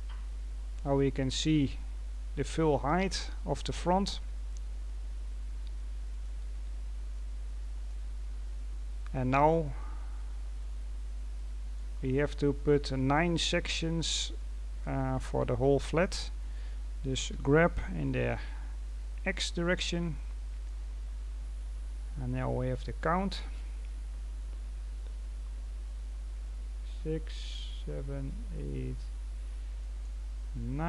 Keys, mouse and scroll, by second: 0.5-3.0 scroll up 6, 3.9 scroll down 1, 6.0 right click, 7.1-8.3 drag, 8.3-9.1 scroll down 2, 9.4-10.4 scroll down 5, 10.4-11.3 scroll down 1, 11.3 middle click, 12.1-14.0 scroll up 2, 14.0-14.3 scroll down 1, 14.3-17.2 middle drag, 17.2 g.